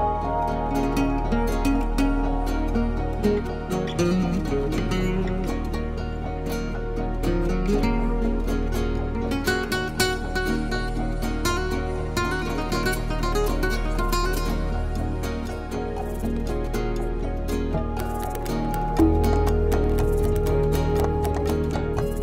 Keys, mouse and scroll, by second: 1.1 click, 1.9 click, 4.4 F12, 7.1 click, 8.9 click, 9.9 F12, 12.2-21.6 typing.